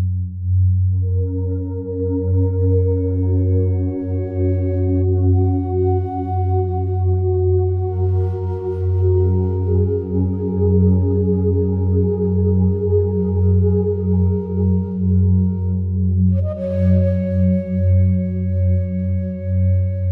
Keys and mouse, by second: 0.7 click, 3.5 click, 5.1 Left, 7.1-8.1 drag, 8.1 Right, 8.3 Right, 8.4 Right, 8.6 Right, 9.0 Right, 9.6 i, 10.2-11.0 drag, 11.2-12.1 drag, 12.4 s, 13.6 click, 14.3 i, 14.7-15.6 drag, 15.8-16.7 drag, 16.7 s, 17.2 0, 18.1 Return, 18.5-20.1 typing, 19.0-19.8 drag.